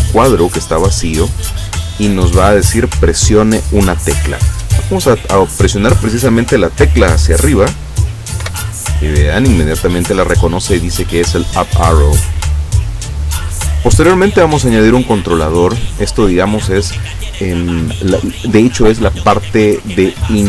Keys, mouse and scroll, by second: 2.2 click, 8.4 Up, 14.3-16.2 drag.